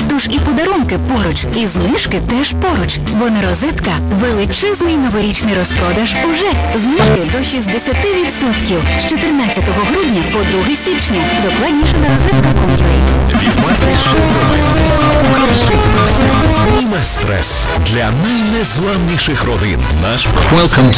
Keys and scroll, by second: 0.5 Return, 16.8 Page_Down.